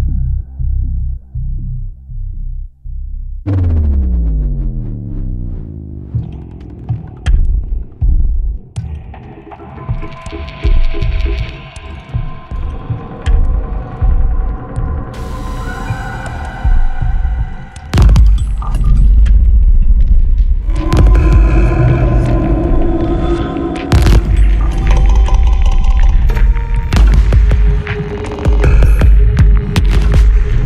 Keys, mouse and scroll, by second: 0.9 scroll down 2, 2.2 click, 2.9 space, 4.0 click, 5.4 click, 6.1-6.6 scroll down 2, 7.8 click, 8.5-9.2 scroll down 4, 9.5 scroll up 2, 10.0 scroll down 2, 11.9 click, 12.8 click, 14.0 click, 15.0 1, 15.4 0, 16.2 click, 17.0 2, 17.4 0, 18.3 click, 19.0-19.4 scroll down 2, 20.3 click, 20.7 right click, 21.5 click, 23.1-26.5 drag, 26.7-27.1 scroll up 2, 27.7-29.4 drag, 29.7-30.0 scroll down 1, 30.2 click.